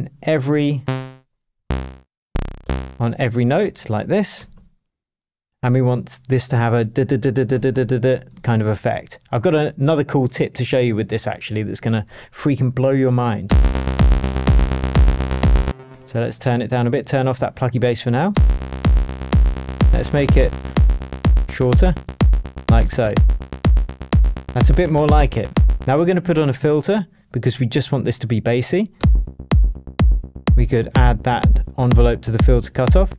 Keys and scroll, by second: 1.6 shift+Down, 2.6 shift+Up, 4.3 super+d, 7.5 super+d, 8.2 shift+super+d, 8.2 shift+super+Tab, 8.8 shift+Tab, 13.4 space, 15.6 space.